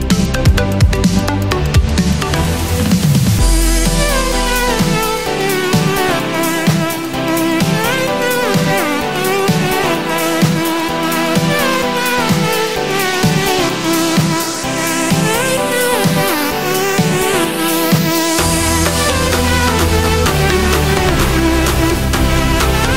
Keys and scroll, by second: 11.5 super+-, 11.7 super+=, 12.1 super+-, 14.1 super+-.